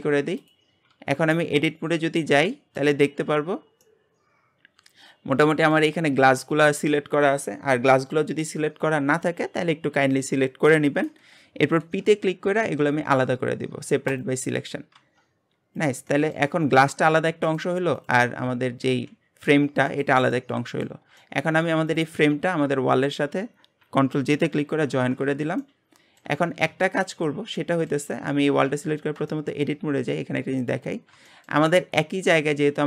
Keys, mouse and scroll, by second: 0.9 Tab, 1.4-3.0 middle drag, 3.0-3.8 scroll up 1, 3.8-7.0 middle drag, 12.0 p, 15.0 Tab, 15.8 click, 16.1 middle click, 16.7 g, 18.0 click, 18.9 g, 20.3-21.9 middle drag, 21.9 click, 22.9 shift+click, 24.9 ctrl+j, 25.6-26.4 middle drag, 26.4-26.8 scroll up 2, 26.8-27.2 shift+middle drag, 27.2 scroll up 2, 27.6-28.7 middle drag, 28.7 Tab, 29.3-30.6 shift+middle drag, 30.6-31.0 drag, 31.0-32.3 scroll up 3, 31.3 shift+middle click, 32.3 click.